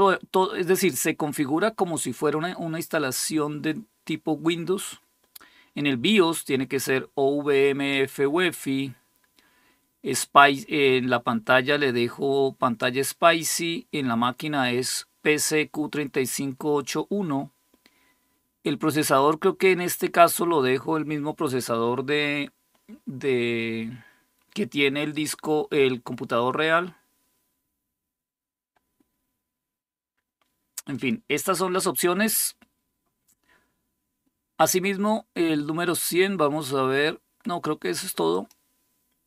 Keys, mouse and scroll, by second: 0.2 click, 30.7 click, 38.1 click.